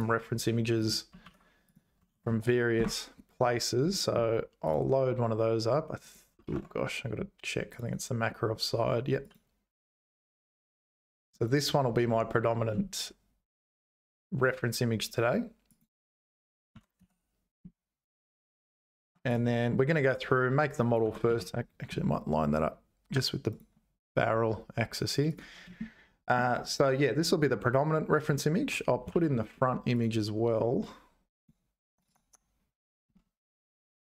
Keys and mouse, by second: 14.0 s, 16.7 g, 20.8 click, 21.0 g, 25.3 click, 25.7 shift+middle click, 28.7 `, 29.1 shift+a.